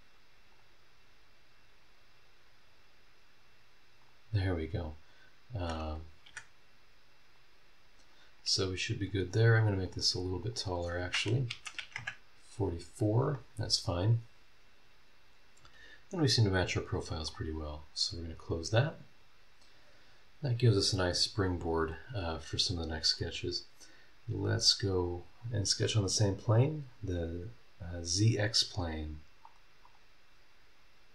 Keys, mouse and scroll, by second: 0.5 click, 4.0 click, 6.3 Escape, 7.3 click, 9.1 click, 9.7 click, 10.4 click, 11.5 KP_4, 12.0 KP_Enter, 17.3 click, 18.2 scroll down 1, 20.6 scroll up 1, 20.9-21.5 scroll down 3, 21.8 scroll up 1, 23.1 click, 24.6 click, 25.0 click, 29.8 click.